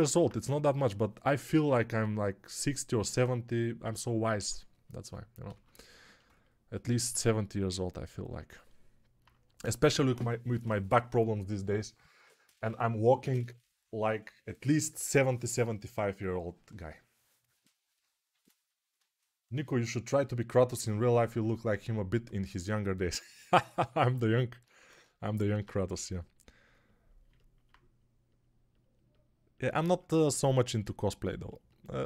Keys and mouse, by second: 24.6 alt+q, 25.8 g, 27.5-29.8 ctrl+alt+right drag, 29.8-32.0 ctrl+alt+shift+drag.